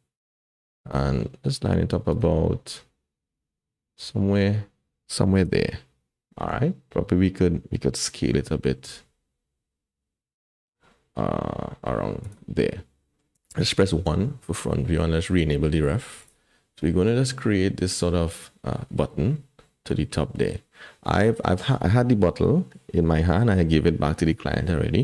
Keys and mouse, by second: 1.2 r, 2.7 r, 8.5 s, 12.6 middle click, 13.9 KP_1, 16.2 click.